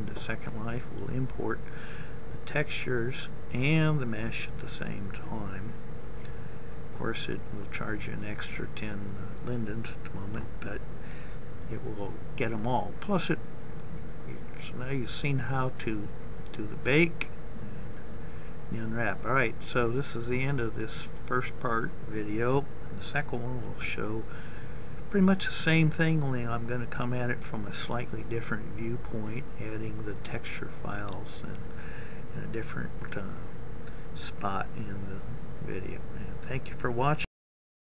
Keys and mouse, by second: 0.8-2.4 middle drag, 12.8-14.3 middle drag.